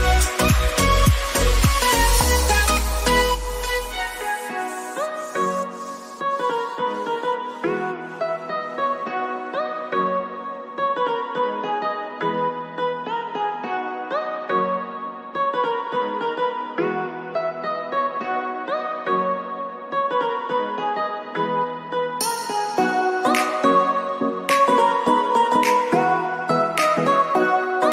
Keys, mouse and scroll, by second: 2.0 Up, 2.5 click, 5.3 click, 5.6 ctrl+2, 6.3 click, 7.5-9.8 shift+drag, 9.8 ctrl+shift+], 11.2 click, 12.3 ctrl+o, 13.2 click, 14.7 ctrl+scroll down 1, 15.8 ctrl+scroll down 1, 16.7 click, 17.4-20.3 drag, 23.9 shift+click, 25.0-27.3 drag.